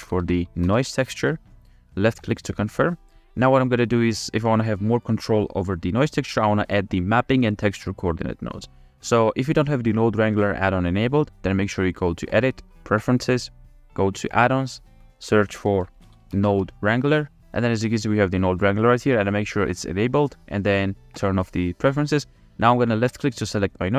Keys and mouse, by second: 3.2 middle click, 3.9-5.1 drag, 6.3 click, 10.0 click, 12.4-13.4 drag, 23.1 click, 23.4 click.